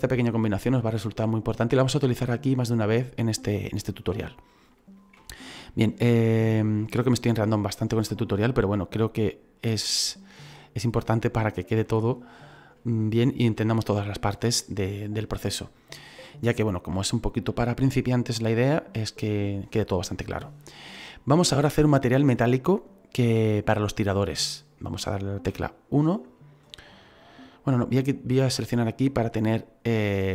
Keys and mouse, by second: 6.7 click, 8.9 typing, 10.4 shift+middle click, 12.0 middle click, 13.6 shift+middle click, 25.5 KP_1, 27.2 click, 27.8 middle click, 29.8 middle click.